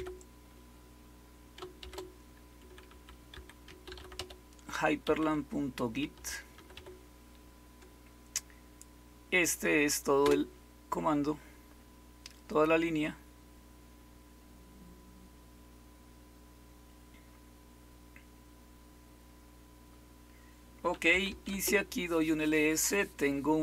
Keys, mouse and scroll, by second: 1.5-7.2 typing, 10.1 Return, 20.8-21.7 typing.